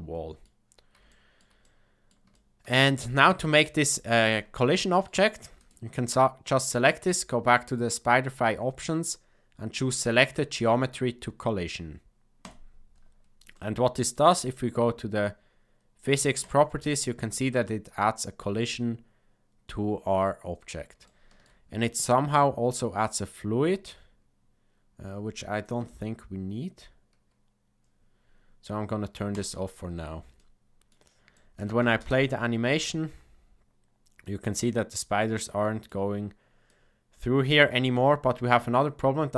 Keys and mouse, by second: 1.1 shift+middle drag, 1.6 middle click, 2.3-2.6 shift+middle drag, 4.5-5.0 shift+middle drag, 5.6 click, 13.5 middle click, 16.4 click, 21.0-21.4 shift+middle drag, 30.3 middle click, 31.3 shift+middle click, 31.7 space, 34.3-36.0 middle drag, 36.7-37.9 middle drag.